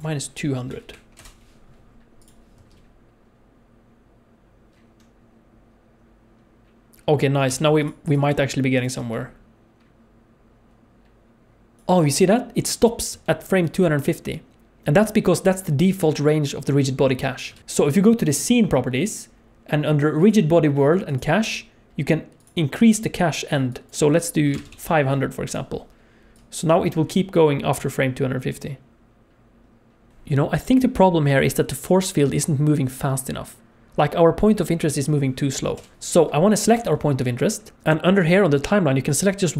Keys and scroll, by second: 2.5 space, 7.4 space, 8.9 space, 13.0 space, 13.1 space, 17.5 alt+a, 24.7 KP_0, 26.7 space, 30.1 alt+a, 30.1 space, 35.8 space.